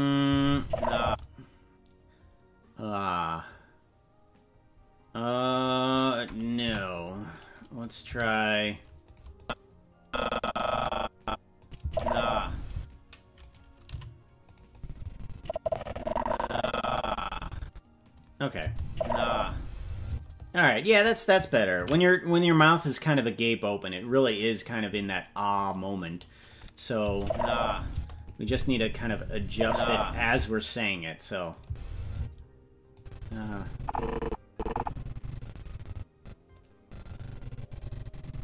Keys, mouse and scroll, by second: 0.0 click, 0.3 space, 1.4 space, 5.5 right click, 6.6 Delete, 7.8 right click, 8.1 g, 9.4-11.3 drag, 11.6 click, 11.8 space, 12.7 space, 13.4 right click, 13.9 g, 14.7-17.6 drag, 18.5 click, 18.6 space, 20.1 space, 24.1 ctrl+s, 26.5 click, 27.0 space, 27.9 space, 28.2 click, 28.4 space, 30.4 space, 31.6 space, 32.1 space, 32.9-38.4 drag.